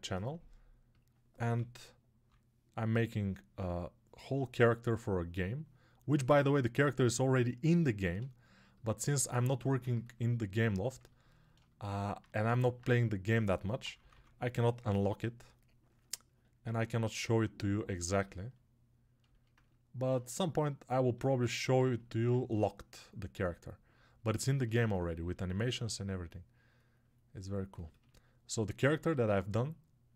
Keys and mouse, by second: 18.3-21.3 alt+right drag, 21.3-30.1 alt+drag.